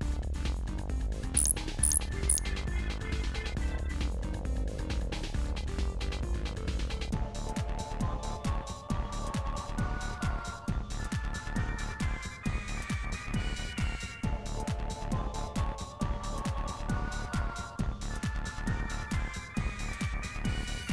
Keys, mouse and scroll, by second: 0.3 ctrl+s, 0.9 click, 1.1-3.0 middle drag, 3.0 click, 3.4 middle click, 3.8 click, 4.1 Delete, 5.0 click, 5.2 Delete, 5.7 click, 5.9 Delete, 6.6 click, 8.2 Delete, 8.5 click, 8.9 Delete, 9.3-15.8 middle drag, 15.8 click, 15.9 middle click, 16.2-16.6 scroll up 4, 16.6 Delete, 16.9 middle click, 17.5-18.1 scroll down 4, 17.6 middle click, 18.1 middle click, 19.8 ctrl+s.